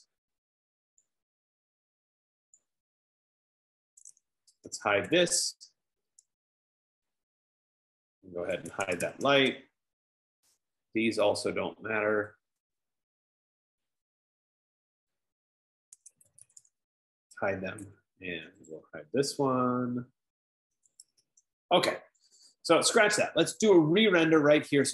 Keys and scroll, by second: 4.6-5.8 typing, 8.8-11.6 typing, 16.4-17.6 typing, 20.9-22.1 typing, 22.3 F15.